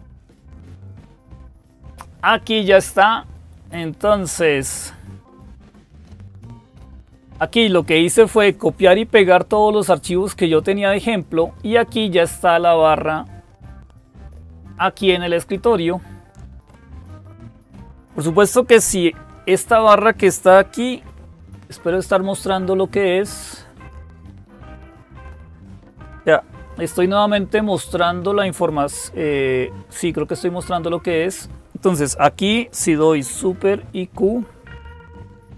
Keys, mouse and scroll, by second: 0.1 click, 2.4 click, 4.1 click.